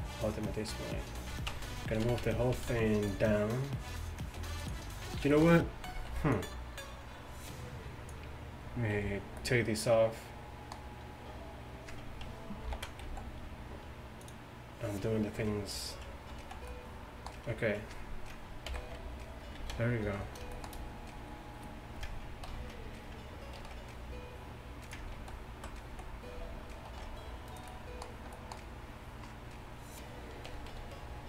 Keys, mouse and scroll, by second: 1.5 Tab, 2.0 a, 2.3 a, 2.6 a, 3.1-5.0 drag, 5.8 middle click, 6.2 b, 9.0 b, 12.7 ctrl+i, 13.1 x, 15.8 click, 16.5 z, 18.7 ctrl+KP_1, 19.6 z, 22.6 ctrl+t, 23.6 ctrl+r, 25.2 ctrl+z, 26.0 z, 27.0 ctrl+r, 27.6-29.4 drag, 30.5 a, 30.8 a.